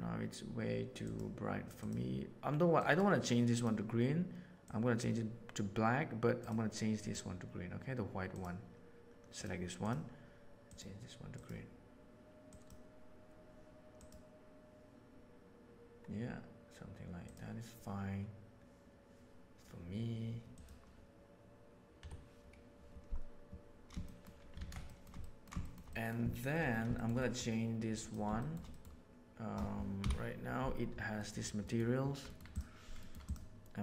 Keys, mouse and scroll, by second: 1.0 click, 2.7 click, 6.9 click, 24.0 middle click, 24.5 alt+a, 24.8 shift+middle click, 25.1 ctrl+middle drag, 25.5 shift+middle click, 25.8 middle click, 26.2 middle drag, 26.9-27.4 middle drag, 28.3 shift+middle drag, 28.6 middle click, 29.9 KP_Decimal, 31.2 middle click, 32.9 middle click, 33.2 click.